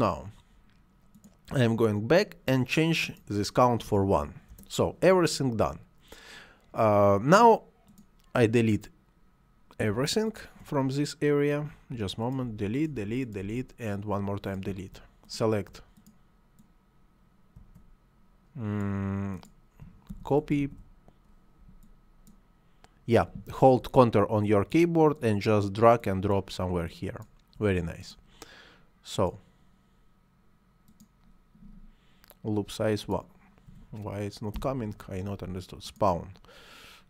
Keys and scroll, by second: 3.6 1, 4.3 Return, 11.5 Delete, 19.9 ctrl+c, 20.4 ctrl+v, 33.5 1, 34.3 Return.